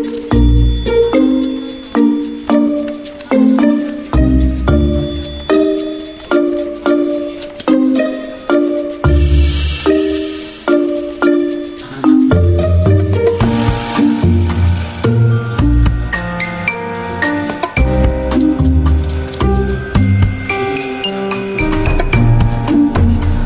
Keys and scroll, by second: 0.9 alt+Tab, 2.4 v, 18.7-19.2 typing.